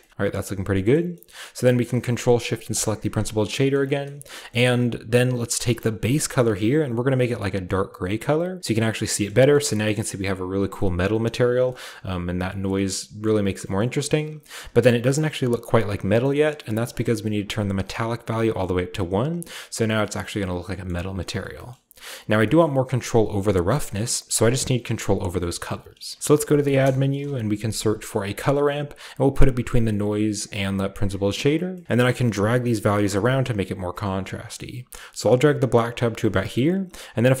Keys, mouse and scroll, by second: 2.7-3.7 ctrl+shift+drag, 4.1 shift+scroll up 1, 5.6 scroll down 1, 5.8-7.6 shift+middle drag, 5.8-6.1 shift+scroll up 1, 5.8 typing, 6.1-7.6 scroll down 1, 6.3-7.6 drag, 8.6-9.5 drag, 8.8-9.5 scroll down 1, 8.9-9.5 middle drag, 9.5 shift+scroll up 1, 10.6 scroll down 1, 11.3 shift+middle click, 11.4-12.6 scroll up 1, 11.8-12.7 shift+middle drag, 12.6-13.4 shift+scroll up 1, 13.4-14.1 scroll down 1, 14.1-15.0 shift+scroll up 1, 15.0-15.9 shift+scroll up 1, 15.1 middle click, 15.3 middle click, 15.9-17.9 scroll up 1, 16.3 middle click, 16.9-17.9 middle drag, 17.9-20.0 drag, 19.5-20.0 scroll down 1, 20.9-21.7 middle drag, 20.9-21.7 scroll up 1, 22.3 shift+scroll down 1, 25.2 scroll up 1, 26.1 shift+a, 26.2 shift+click, 26.7 c, 26.9 o, 27.1 l, 28.3 typing, 28.4-29.9 drag, 30.0 click, 30.7 click, 31.1-35.2 scroll up 1, 36.1-37.4 scroll down 1.